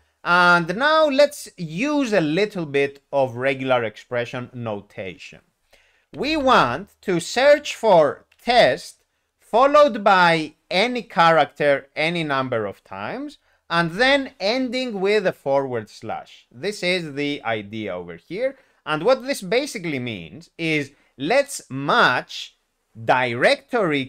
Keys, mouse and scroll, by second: 6.1 ., 6.2 ., 6.3 ., 6.5 ., 8.3 ., 9.4 ., 13.8 ..